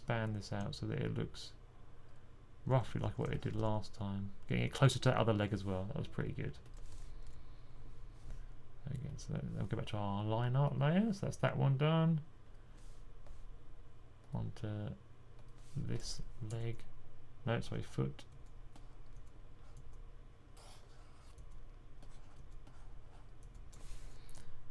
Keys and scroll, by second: 2.5-3.4 typing, 6.8-7.1 typing.